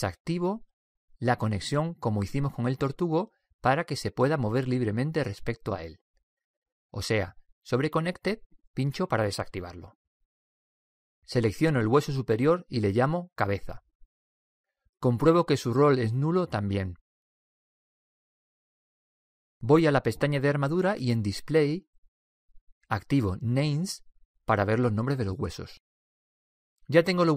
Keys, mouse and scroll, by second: 9.2-11.0 drag, 12.9 typing, 13.5 right click, 14.4-16.0 drag, 16.1 click, 20.0 middle click, 20.9 click, 21.1 middle click, 21.7-23.3 drag, 24.0-25.2 drag, 24.5 right click, 25.2 middle click, 26.0-27.0 middle drag, 27.2 middle click.